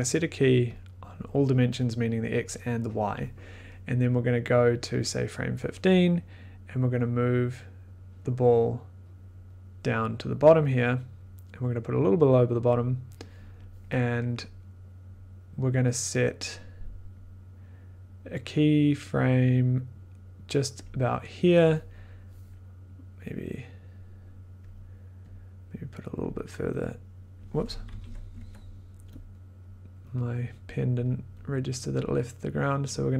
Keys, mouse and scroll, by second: 0.7 click, 5.0 click, 5.3 click, 5.4 click, 5.6 click, 12.7 click, 13.2-17.8 drag, 20.7 click, 21.3-24.0 drag, 24.6 click, 26.2 click, 27.9 ctrl+z, 29.2 click, 30.4 click.